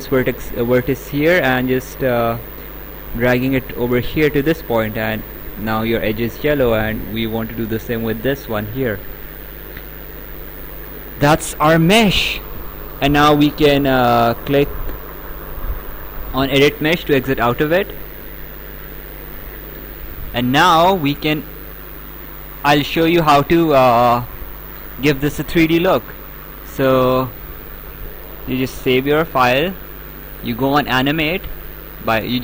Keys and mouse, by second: 0.3 click, 6.8 click, 9.7 right click, 10.9 right click, 17.0 click, 18.2 right click, 29.1 ctrl+s, 30.3 click.